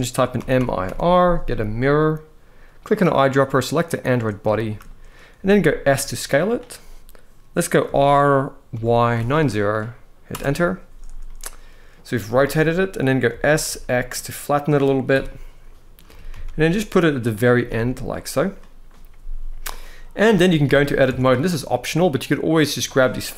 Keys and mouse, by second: 2.5 click, 4.2 shift+middle click, 5.1 s, 7.5 r, 8.4 y, 8.8 9, 10.0 Return, 10.0 0, 10.0 \, 10.9-11.6 middle drag, 12.0 shift+middle drag, 12.9 s, 13.3 x, 14.8 KP_1, 15.8 g, 16.2 x, 17.0 click, 17.3 s, 17.4 x, 18.1 click, 19.5-19.8 middle drag, 20.0 shift+middle drag, 20.8 Tab, 22.2 click, 23.3 ctrl+b.